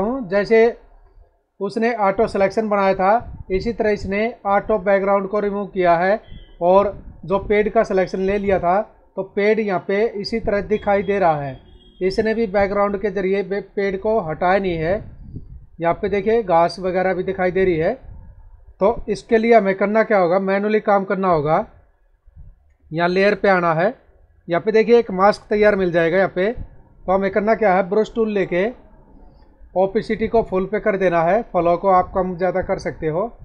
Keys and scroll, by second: 6.5 space.